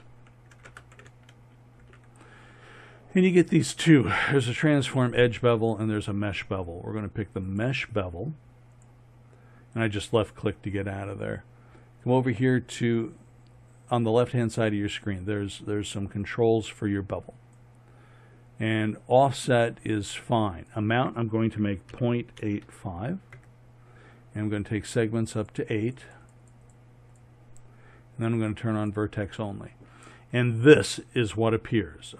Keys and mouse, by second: 14.4-18.7 drag, 18.7-29.2 middle drag, 29.2 click.